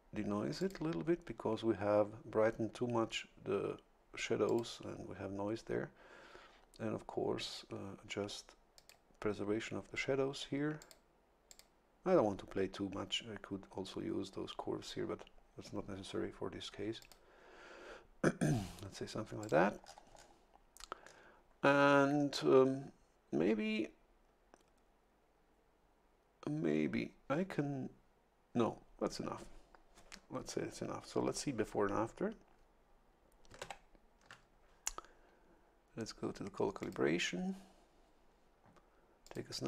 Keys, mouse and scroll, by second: 0.6 click, 4.4 click, 4.9-8.8 middle drag, 8.8 click, 9.2 middle click, 10.8 click, 11.5 click, 17.0 click, 19.4 click, 19.8-20.4 scroll down 2, 21.2 scroll down 1, 33.6 ctrl+shift+l, 36.8 click, 39.2 click.